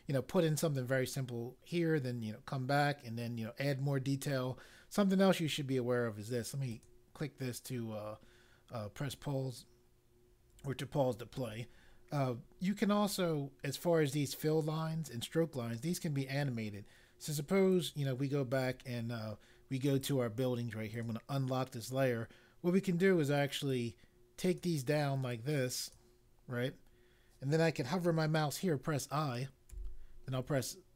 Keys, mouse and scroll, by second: 6.7 click, 17.6 click, 20.0 click, 23.7 click, 25.3 click, 29.7 i.